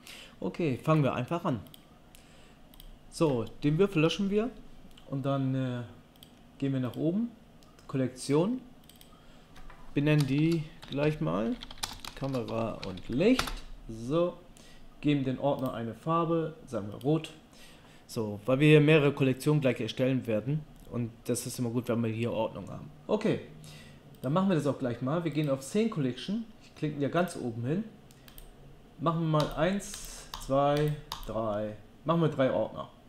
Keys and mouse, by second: 1.8-8.8 right drag, 4.1 Delete, 24.2-25.3 drag, 25.4-27.2 drag, 27.3-33.0 drag.